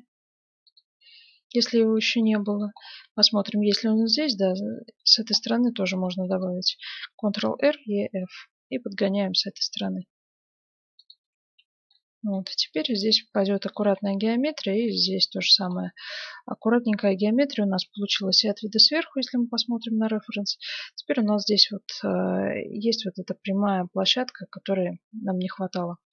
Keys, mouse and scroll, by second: 1.3-5.9 middle drag, 5.9 ctrl+r, 6.4-7.4 middle drag, 11.3 Tab, 11.9-14.9 middle drag, 15.5 middle click, 16.6-17.9 middle drag, 17.9 KP_7, 18.9 z, 19.8-21.8 middle drag, 23.9 z, 25.2 middle click.